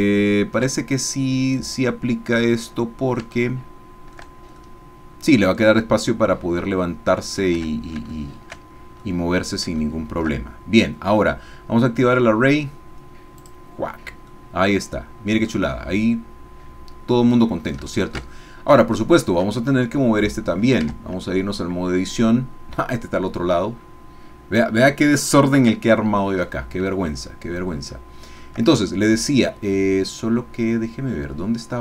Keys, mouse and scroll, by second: 0.8-3.3 shift+middle drag, 3.5 shift+middle click, 6.8 middle click, 7.6 Tab, 8.2 shift+middle click, 8.7 shift+scroll down 1, 9.0 middle click, 9.9 shift+middle click, 13.4 click, 14.4-17.9 drag, 17.9 shift+click, 18.9 shift+click, 20.2 click, 21.4 Tab, 27.0-28.4 shift+drag, 29.8-31.8 middle drag.